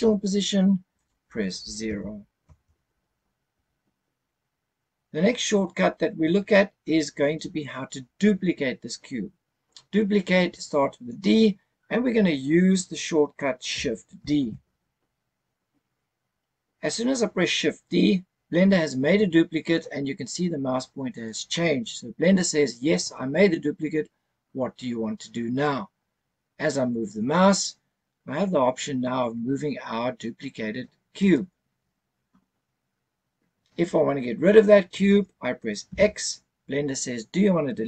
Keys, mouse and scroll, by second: 0.9-2.4 drag, 6.4-9.4 scroll down 1, 14.3 shift+d, 31.1 click, 35.9 x, 37.0 x.